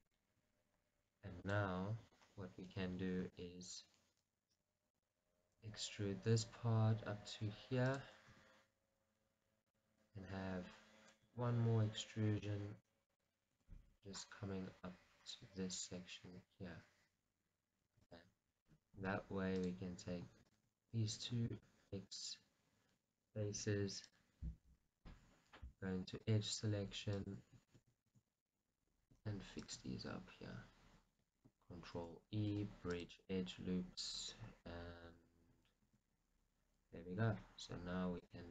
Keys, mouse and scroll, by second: 0.2 click, 1.6 click, 3.7 e, 5.2-9.8 drag, 5.2 right click, 5.7 g, 8.4 r, 11.5 e, 13.4 click, 13.5 right click, 13.9 g, 18.6-19.0 scroll, 19.8 click, 20.5 shift+click, 21.7 x, 26.6 click, 27.3 alt+click, 28.5 z, 28.6-38.5 middle drag, 30.3-31.8 scroll up 2, 31.8 scroll up 1, 32.1 ctrl+e.